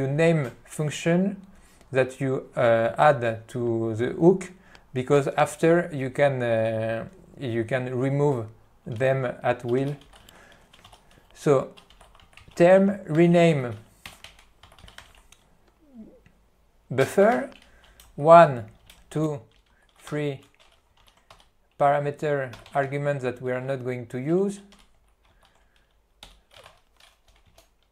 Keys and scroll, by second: 9.9 ., 17.4 Tab, 18.4 ., 20.3 Tab, 21.2 ctrl+g, 21.4 Tab, 22.6-23.7 typing, 24.8 t, 25.5 alt+f, 26.3-27.9 typing.